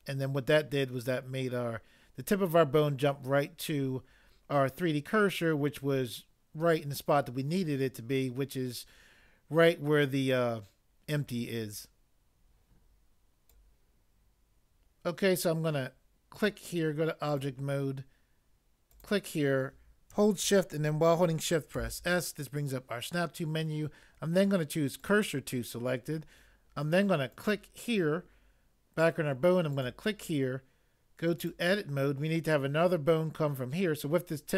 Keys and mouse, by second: 21.8 s.